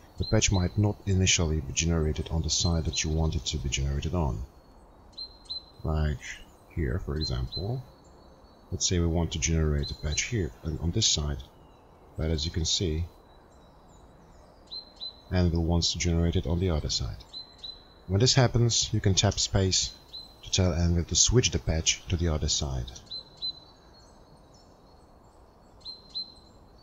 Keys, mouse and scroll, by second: 21.4 space.